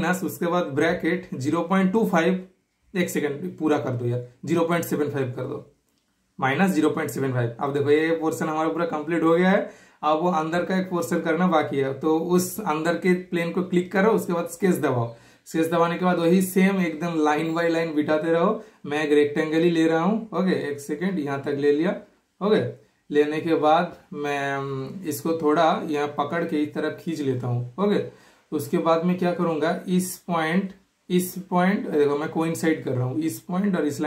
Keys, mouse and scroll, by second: 6.4 super+Return, 6.4 typing, 7.5 super+scroll down 1, 7.5 typing, 7.8 super+middle click, 13.1 super+click, 14.3 super+middle click, 14.8 super+scroll up 1, 15.0 super+scroll down 1, 15.1 typing, 19.1 super+click, 20.1 super+click, 21.0 typing, 23.1 super+click, 24.0 super+right click, 24.5-29.2 super+drag, 30.8-32.6 super+drag, 33.2 super+click.